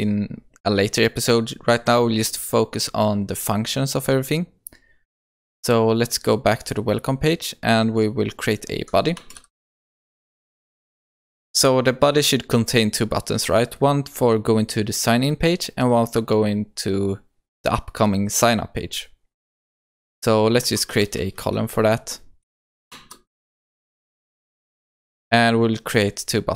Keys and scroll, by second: 10.0 Return, 22.5 Return, 23.7 Return.